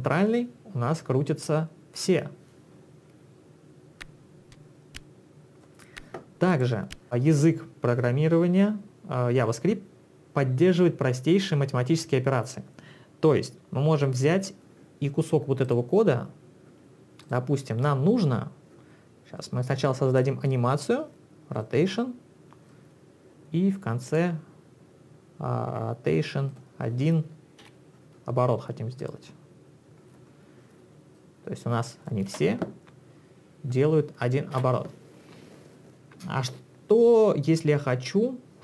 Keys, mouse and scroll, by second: 6.5 click, 15.7 click, 17.2 click, 19.4 click, 21.6 click, 22.7 click, 26.5 click, 27.7 1, 29.0 click, 31.2 click, 32.3 space, 34.6 space.